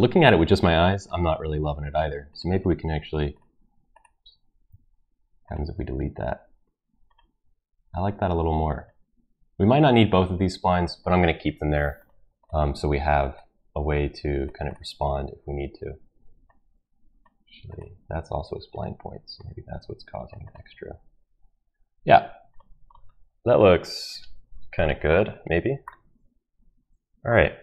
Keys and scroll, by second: 4.7 Delete, 5.6 Delete.